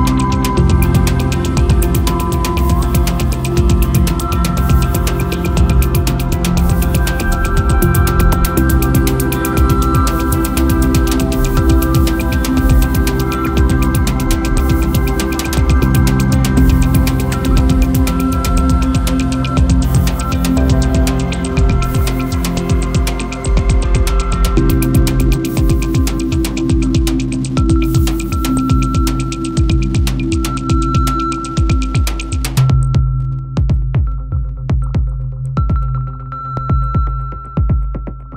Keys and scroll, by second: 24.2 super+z, 28.3 super+z, 35.1 super+z, 36.6 super+z.